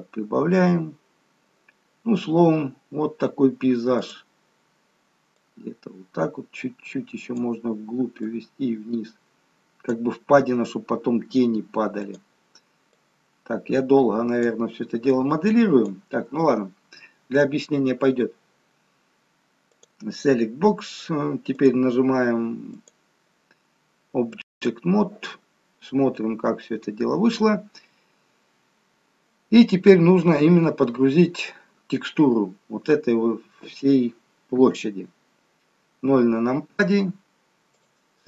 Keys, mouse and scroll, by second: 4.1 click, 5.6 click, 12.1 click, 13.1 click, 19.8 click, 21.7 click, 24.3 click, 34.6 KP_0, 37.7 click.